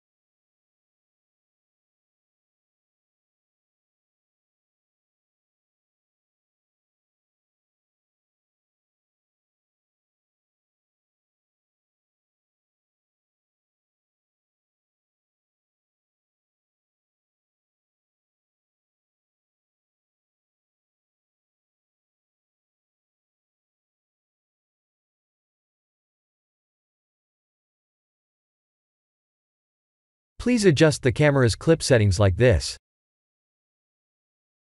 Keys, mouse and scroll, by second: 0.8 g, 3.0 click, 3.3 middle click, 4.4 middle click, 4.5 middle click, 4.9 middle click, 5.0 middle click, 5.2 middle click, 5.7 middle click, 6.1 click, 6.6 KP_7, 7.5 r, 8.4 g, 9.4 KP_1, 11.8 middle click, 12.4 middle click, 12.8-13.3 scroll down 4, 13.3 middle click, 16.2 scroll up 1, 17.2 click, 18.1 g, 19.7 s, 21.4 g, 28.9 middle click, 30.2 ctrl+alt+KP_0, 31.2 shift+`, 33.2 click, 33.6 click.